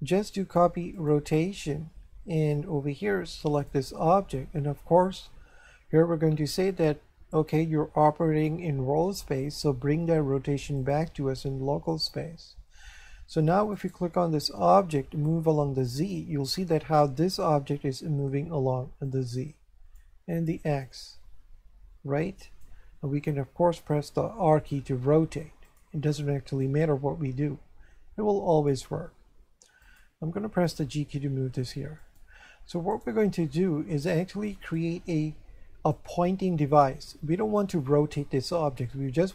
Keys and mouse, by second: 0.9 click, 2.4 click, 3.5 click, 10.8 click, 11.9 click, 13.7 right click, 15.2 click, 19.1 click, 20.8 click, 24.5 r, 25.7 click, 29.1 r, 29.8 click, 30.6 g, 32.0 click, 32.9 right click, 34.7 click.